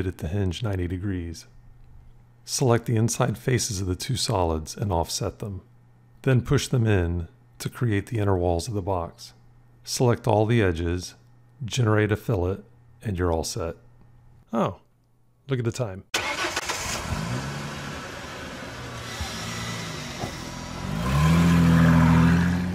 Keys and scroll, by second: 4.8 o.